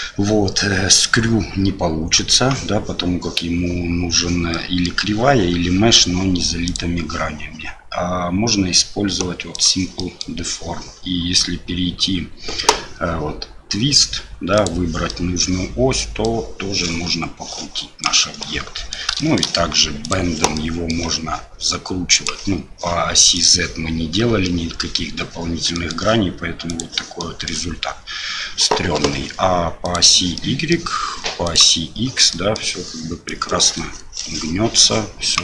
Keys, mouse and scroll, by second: 4.5 middle click, 6.6-9.6 drag, 10.0 middle drag, 14.5 click, 15.1 middle click, 16.3-18.1 drag, 18.4-18.9 middle drag, 19.2 shift+middle drag, 20.0 click, 20.5 middle click, 22.1 click, 23.3 click, 24.4-24.8 middle drag, 25.7 middle click, 26.7 click, 27.2-27.5 middle drag, 29.8 click, 30.3-30.7 middle drag, 31.4 click, 32.3 middle drag, 33.3-35.4 drag.